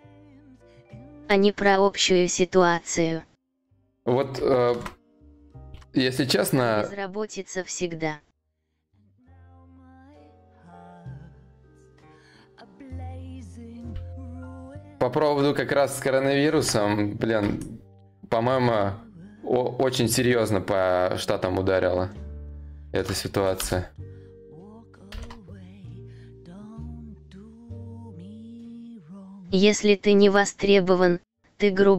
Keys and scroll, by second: 14.8 ctrl+v, 16.0 ctrl+i, 23.1 Return, 24.7 ctrl+d.